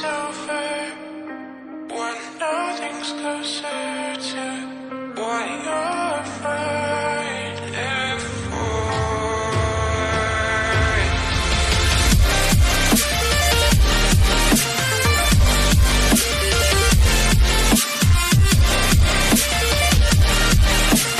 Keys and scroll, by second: 3.6 n, 3.7 ctrl+j, 11.5-12.9 typing, 14.6-21.1 typing.